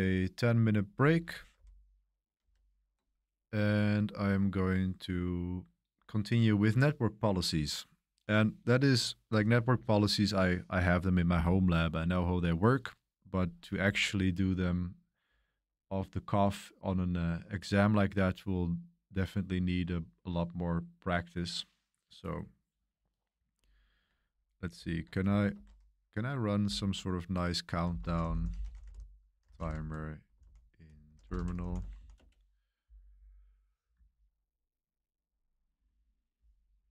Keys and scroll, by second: 1.5 super+7, 2.4 super+3, 2.5 super+3, 2.6 super+7, 2.6 super+3, 25.5 super+1, 26.6 super+t, 27.6-31.9 typing, 32.1 Return.